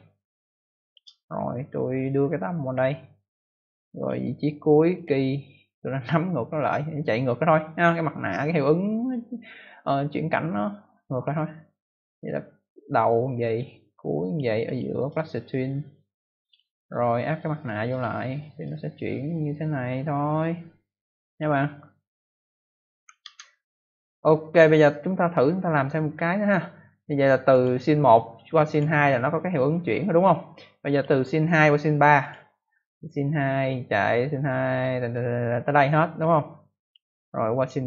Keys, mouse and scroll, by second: 2.0 click, 3.9 click, 4.0 click, 4.9 click, 5.8 click, 12.3 click, 14.6 click, 14.7 click, 14.9 right click, 15.0 double right click, 16.3 click, 17.8 click, 18.6 click, 23.1 ctrl+s, 27.4 click, 28.6 click, 30.4 click, 32.1 click, 33.2 click, 37.5 click, 37.6 click.